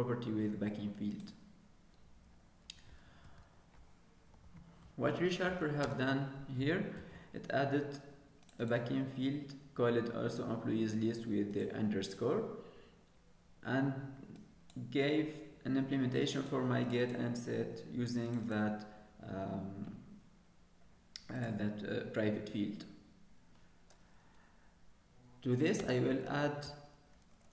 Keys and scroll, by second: 3.2 Tab, 4.6 Tab, 6.9 ctrl+s.